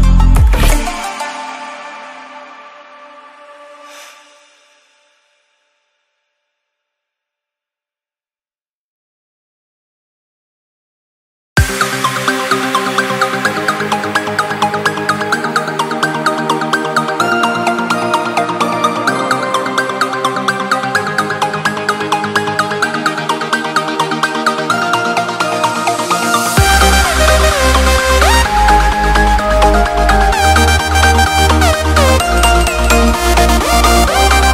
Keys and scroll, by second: 1.2 Return, 3.5 alt+7, 11.0 Return, 12.7 Escape, 18.6 Escape.